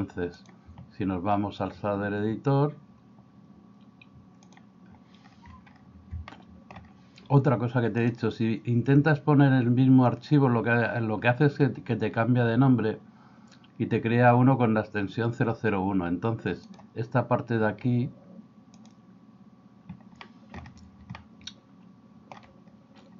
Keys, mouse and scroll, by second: 0.5-4.6 drag, 6.4 middle click, 19.3 click, 20.3 middle click, 21.2-22.3 middle drag.